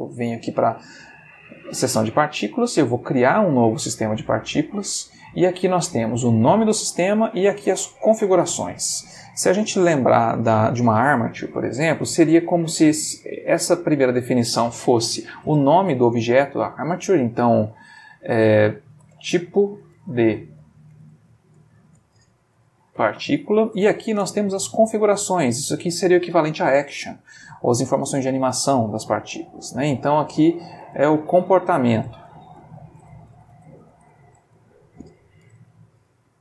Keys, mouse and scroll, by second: 3.0 click, 13.8 click, 18.9-23.5 typing, 23.8 shift+Return, 25.2 click, 30.8-34.2 typing, 35.4-36.4 typing.